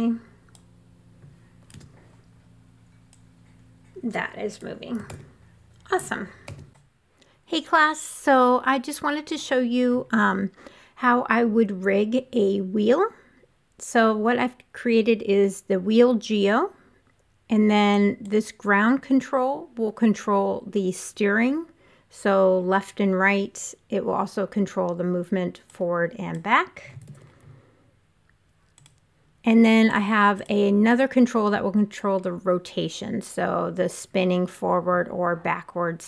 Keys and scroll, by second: 1.1 w, 4.5 super+z, 5.9 super+z, 27.0 super+z.